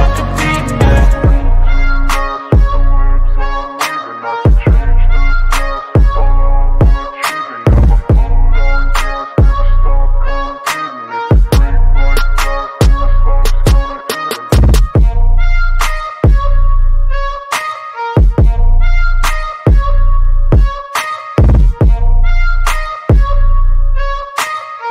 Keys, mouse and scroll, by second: 0.1 click, 0.9 ctrl+b, 1.3 click, 1.6 ctrl+b, 1.9 click, 2.2-2.6 drag, 4.0-4.3 drag, 4.7-5.1 drag, 5.3-8.7 drag, 9.5 click, 10.2 ctrl+b, 10.5 click, 11.2 click, 11.6 ctrl+b, 11.9 click, 12.2-12.7 drag, 14.4-15.7 drag, 16.9 click, 17.5 ctrl+b, 17.9 click, 18.3 ctrl+b, 18.7 click, 19.0-19.5 drag, 21.3 click, 22.3 click, 23.1 ctrl+b, 23.4 click, 24.7 click.